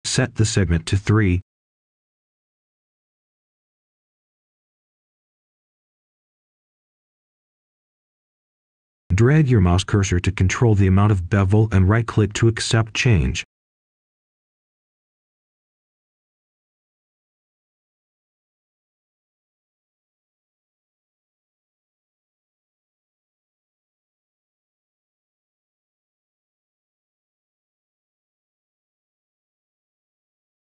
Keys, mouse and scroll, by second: 0.1-1.5 scroll up 1, 1.5 right click, 2.6 b, 4.1 Return, 6.8-7.9 drag, 8.1 3, 9.1 Return, 14.9 click, 15.5-16.2 scroll down 1, 16.2 right click, 16.9 Tab, 20.1-21.3 scroll up 1, 21.6 ctrl+shift+click, 23.2-23.7 scroll down 1, 23.7 right click, 24.6-25.0 scroll up 1, 25.0 right click, 25.6-26.1 scroll up 1, 26.4 ctrl+shift+click, 27.6-27.9 scroll down 1, 27.9 right click, 28.9-29.5 scroll up 1, 29.9 ctrl+shift+click.